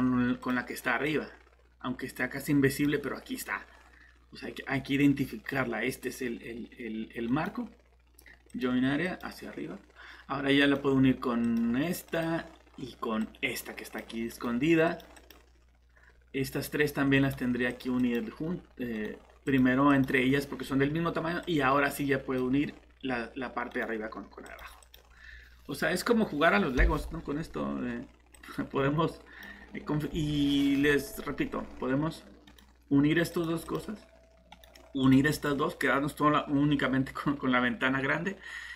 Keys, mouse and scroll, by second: 0.4 click, 7.3 right click, 8.5 click, 10.6 right click, 11.4 click, 14.3 right click, 14.9 click, 17.2 right click, 17.7 click, 18.9 right click, 19.4 click, 23.7 right click, 24.4 click, 32.5 right click, 33.3 click, 34.5 right click, 35.0 click.